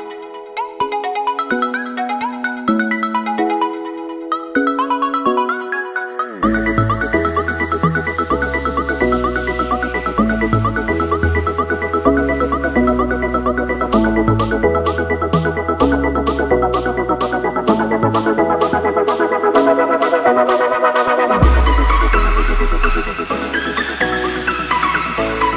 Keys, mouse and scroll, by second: 4.8 Delete, 5.9 click, 13.8 Return, 15.1 ctrl+u, 15.8 click.